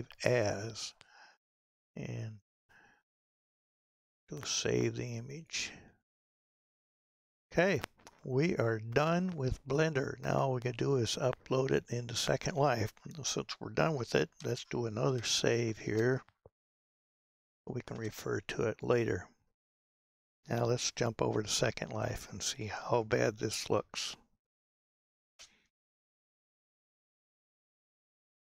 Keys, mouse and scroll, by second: 0.6 click, 15.3 ctrl+shift+s.